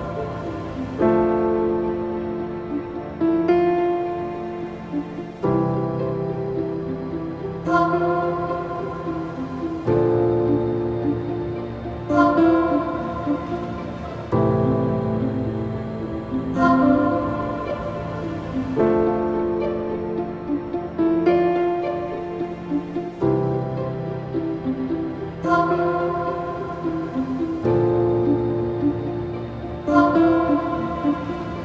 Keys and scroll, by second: 5.4 space, 12.1 space, 13.2 ctrl+-, 15.9 space, 21.4 ctrl+=, 21.6 space, 26.5 space, 27.1 ctrl+-, 27.4 space, 31.2 ctrl+z.